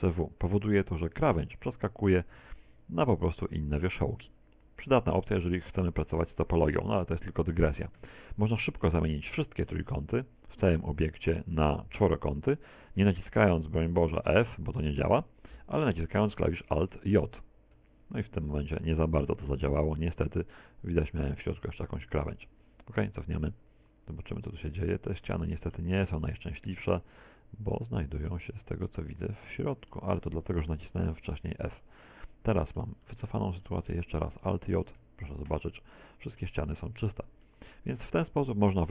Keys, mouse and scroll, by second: 10.7 ctrl+f, 16.1 a, 16.4 a, 16.9 middle click, 17.9 middle click, 18.5 middle click, 22.2 f, 25.2 alt+j, 26.3 middle click, 27.7 middle click, 27.7 z, 30.5 ctrl+z, 30.8 middle click, 32.5 z, 32.8 z, 32.9 middle click, 33.7-38.8 scroll up 4, 38.8 middle click.